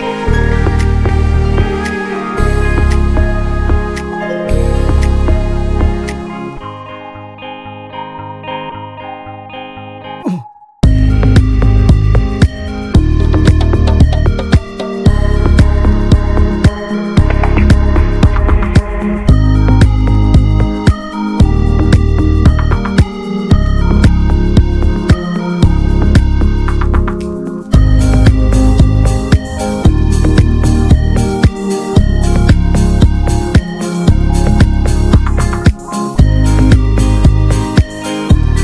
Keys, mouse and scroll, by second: 0.0 click, 0.5 scroll down 2, 0.8-3.7 middle drag, 3.7-4.2 drag, 4.2 middle click, 4.5 ctrl+s, 10.1-11.4 drag, 11.4-13.1 middle drag, 13.1-15.3 drag, 17.3-21.3 drag, 21.5 scroll down 1, 21.6 middle click, 22.1 scroll up 1, 22.3 ctrl+s, 22.8-28.6 drag, 28.6 middle click, 29.0 scroll up 1, 29.3 ctrl+s, 30.0-32.8 drag, 32.8-33.1 scroll down 1, 33.1 middle click, 33.7 ctrl+s, 33.9 shift+a, 34.9 scroll down 1, 35.1 middle click, 35.3 s, 36.8 s, 37.3-37.7 scroll up 3, 37.7 middle click, 38.0 scroll down 2, 38.2-38.6 shift+middle drag.